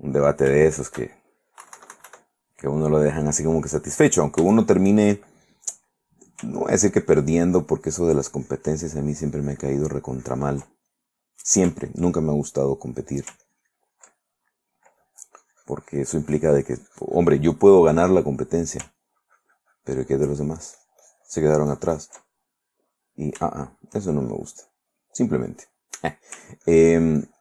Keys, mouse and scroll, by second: 0.1 ctrl+click, 0.8 shift+click, 1.8 KP_Subtract, 2.7 click, 3.6-5.6 drag, 6.1 click, 7.0-10.8 ctrl+drag, 11.1 ctrl+middle click, 12.3-13.4 ctrl+middle drag, 13.6 ctrl+click, 14.4 ctrl+middle click, 15.2-17.8 drag, 18.5 middle click, 19.2-22.4 ctrl+drag, 22.5 ctrl+middle click, 23.1 ctrl+middle click, 23.8-25.3 shift+middle drag, 26.5 ctrl+middle click, 26.8 ctrl+click.